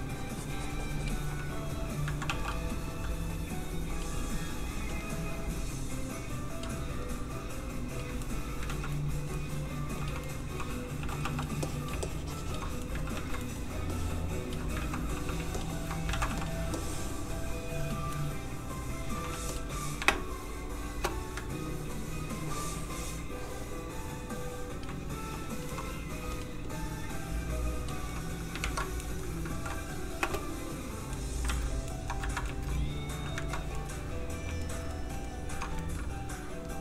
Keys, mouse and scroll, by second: 2.0 ctrl+click, 2.2 ctrl+f, 2.4 click, 2.7 click, 4.6 f, 4.8 click, 7.6 ctrl+click, 8.2 ctrl+middle click, 8.3 middle click, 8.9 ctrl+z, 8.9 middle click, 9.8 f, 10.0 click, 10.2 middle click, 11.0 g, 11.2 f, 11.3 click, 12.0 shift+click, 12.8 middle click, 12.9 ctrl+middle click, 13.0 ctrl+z, 13.4 ctrl+middle click, 13.5 middle click, 13.9 click, 14.8 ctrl+z, 15.1 f, 15.5 shift+click, 16.1 ctrl+shift+z, 16.3 f, 16.4 click, 17.0 shift+click, 18.1 shift+middle click, 18.2 middle click, 19.3 shift+f, 19.5 click, 20.0 shift+space, 21.3 ctrl+space, 21.7 ctrl+click, 25.3 click, 25.5 click, 25.7 middle click, 26.2 f, 26.3 click, 28.1 middle click, 28.6 ctrl+Tab, 29.1 middle click, 29.5 ctrl+s, 30.2 s, 31.1 middle click, 31.6 alt+shift+z, 31.9 middle click, 32.2 ctrl+middle click, 32.4 shift+middle click, 32.7 middle click, 32.8 middle click, 33.5 ctrl+middle click, 33.7 shift+middle click, 33.9 middle click, 34.0 middle click, 34.4 shift+middle click, 35.0 shift+middle click.